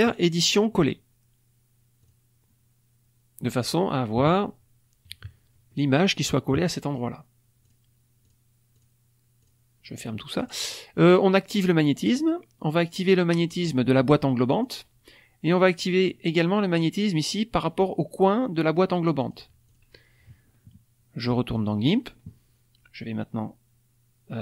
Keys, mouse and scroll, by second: 0.5 click, 1.9 click, 2.2-4.1 middle drag, 4.1 KP_Subtract, 4.1-4.5 scroll down 1, 5.0 KP_Subtract, 5.6-6.1 scroll down 1, 7.6 click, 8.2 click, 8.7 click, 9.4 click, 10.1 middle click, 10.1-10.6 scroll up 1, 14.5 click, 19.1 click, 19.6 click, 21.4 click.